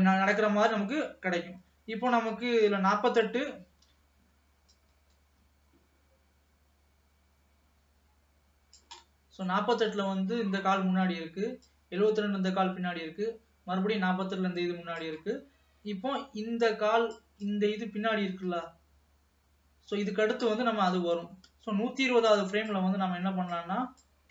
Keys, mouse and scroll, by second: 4.9-7.9 drag, 9.3 middle click, 9.9 ctrl+s, 10.3-11.8 middle drag, 11.8-14.8 drag, 16.9-20.7 drag, 23.7-24.3 drag.